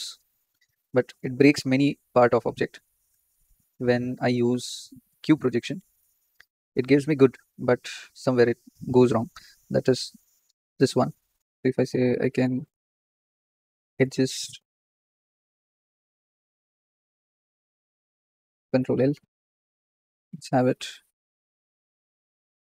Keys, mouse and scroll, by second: 0.2-3.3 middle drag, 0.2-1.3 scroll up 4, 1.3-1.9 scroll up 1, 1.9-3.3 scroll up 1, 6.1 click, 6.8-7.6 scroll down 4, 11.5 click, 12.4 Escape, 13.1 ctrl+z, 13.5 click, 13.8-14.1 scroll down 7, 14.1 click, 16.1 t, 17.7 click, 18.7 ctrl+l, 19.6 g, 22.1 scroll up 3.